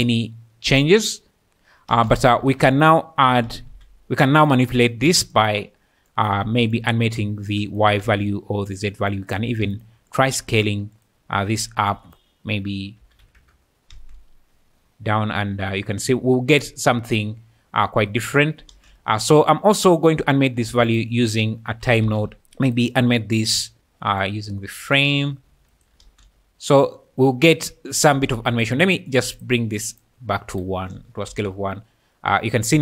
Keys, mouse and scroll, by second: 1.9 space, 2.1 click, 2.5 shift+a, 5.3 click, 6.8 shift+middle click, 8.1 ctrl+z, 9.1 click, 9.5 shift+d, 9.7 click, 10.1-11.1 drag, 12.0-13.4 drag, 13.9 space, 18.7 space, 19.0 click, 20.6 shift+a, 22.7 click, 24.2 drag, 26.0 space, 28.4 Escape, 28.9 click, 29.1-30.6 drag, 31.3 space.